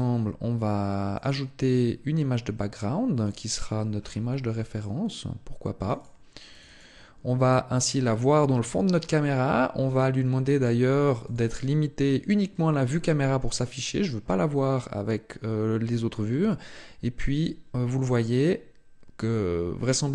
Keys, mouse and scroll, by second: 0.9 click, 1.5 click, 1.9 scroll down 2, 2.9 click, 3.8 scroll down 1, 4.5 click, 6.6 click, 7.9 scroll up 1, 8.5 scroll up 1, 9.6-10.2 scroll down 2, 11.1 click.